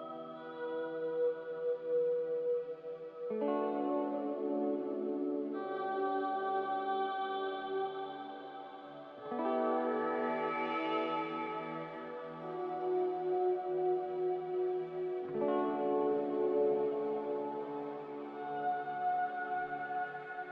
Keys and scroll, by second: 0.1 a, 3.0 space, 12.6 9, 12.7 0, 13.0 Return, 17.8 9, 17.9 0, 18.1 Return.